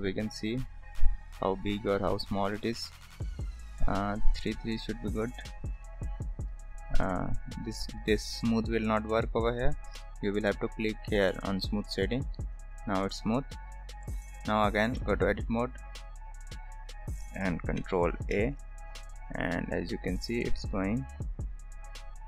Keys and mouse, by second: 1.0 click, 5.3-6.0 right drag, 6.4 click, 8.0-8.8 right drag, 9.1-9.6 right drag, 11.8 click, 14.1 click, 15.0 Tab, 18.4 ctrl+a.